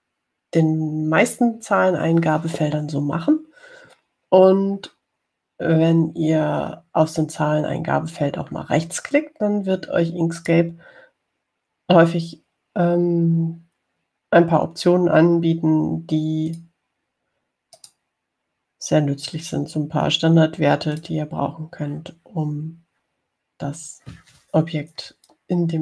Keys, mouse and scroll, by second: 11.6 right click, 17.8 click, 19.0 right click, 22.2 click.